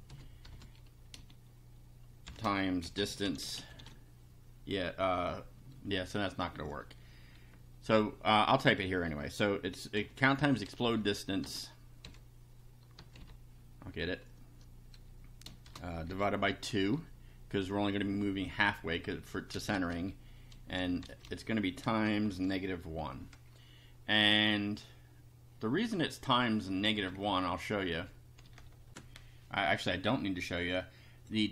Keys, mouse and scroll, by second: 0.0-0.5 typing, 2.2-4.6 typing, 9.6-13.2 typing, 15.4-16.9 typing, 19.5 space, 21.0-22.9 typing, 27.1 Down, 27.8 Up, 28.4 Return, 28.9 ctrl+r, 30.7 click.